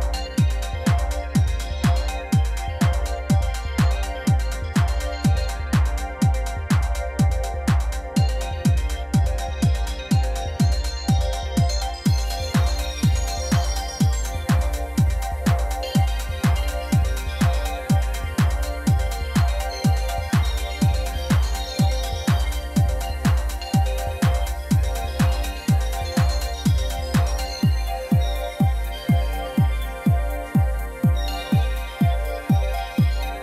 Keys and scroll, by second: 1.2 shift+Tab, 6.6 g, 6.8 z, 7.6 alt+a, 12.4 shift+a, 13.6 g, 13.7 z, 15.3 g, 15.4 z, 16.3 Tab, 17.0 s, 17.6 z, 17.8 Tab, 18.0 g, 18.1 z, 19.0 Tab, 20.4 ctrl+r, 21.1 2, 21.4 Return, 22.3 ctrl+r, 22.7 2, 22.8 Return, 23.7 ctrl+r, 24.1 Return, 24.5 a, 25.7 z, 33.1 2, 33.2 Return.